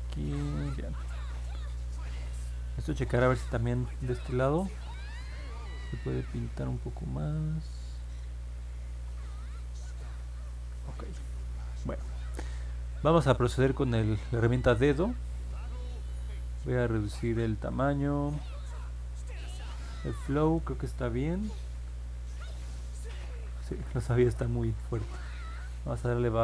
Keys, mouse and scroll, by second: 1.6 middle click, 2.5 middle click, 5.5-8.4 drag, 10.7 ctrl+z, 23.8 ctrl+z.